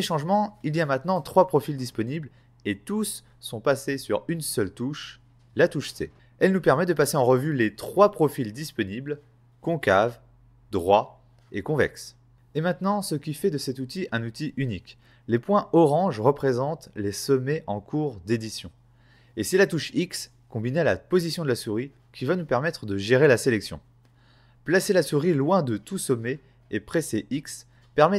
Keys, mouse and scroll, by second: 7.9-8.6 typing, 9.7-13.2 typing.